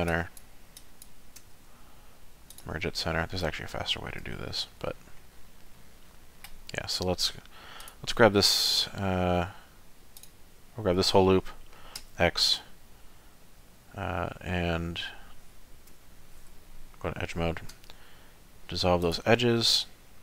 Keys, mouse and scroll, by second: 0.1 click, 0.8 click, 1.4 m, 3.0 middle click, 3.7 shift+middle click, 4.3 middle click, 4.9-5.3 scroll down 1, 5.3 middle click, 7.8 alt+click, 10.2 alt+click, 12.0 x, 16.0 2, 17.7 x.